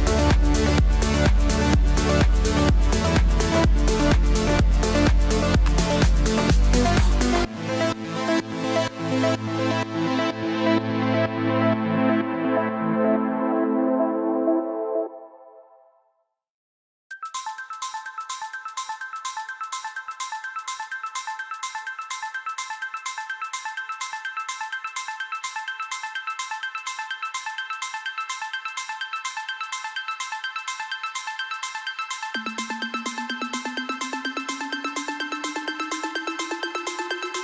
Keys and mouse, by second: 6.7 click, 8.3 KP_3, 8.5 KP_0, 10.1 Return, 13.7 click, 15.6 click, 19.7 click, 29.4 right click, 29.5 right click, 35.0 e.